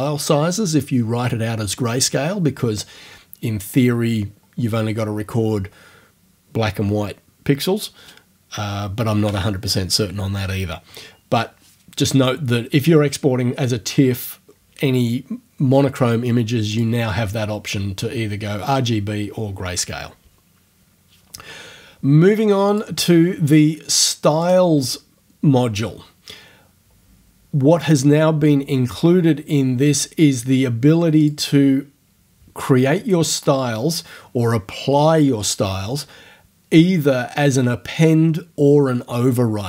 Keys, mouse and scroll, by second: 16.8 click, 22.7 click, 24.4 click, 31.3 click.